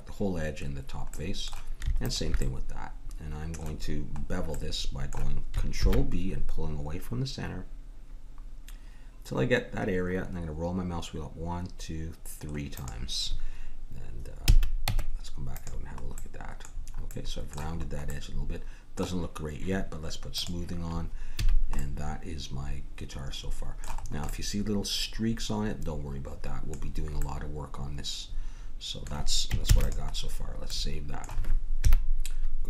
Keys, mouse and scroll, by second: 1.1 middle click, 2.0-4.0 drag, 4.0-8.9 middle drag, 5.7 ctrl+b, 14.5 a, 14.8 Tab, 16.2-18.1 middle drag, 20.3-22.2 drag, 21.4 a, 24.0 middle click, 26.1-27.2 middle drag, 29.7 ctrl+s, 31.8 KP_1.